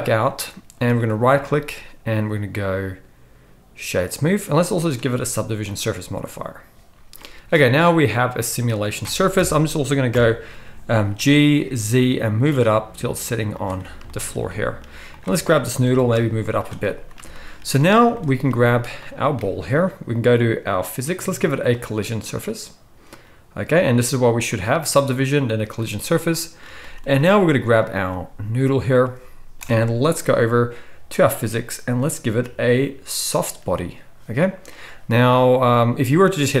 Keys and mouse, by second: 1.1-4.8 drag, 4.8-11.4 middle drag, 10.1 KP_1, 11.1 g, 13.5 click, 13.5-20.8 middle drag, 13.5-14.2 right drag, 15.1 click, 15.1 right click, 15.8 g, 19.0-20.8 drag, 19.0-20.8 right drag, 20.8-21.7 drag, 21.7-23.8 middle drag, 23.8-24.4 drag, 24.4-27.7 middle drag, 27.7-33.4 drag, 29.6 n, 33.4-36.6 middle drag.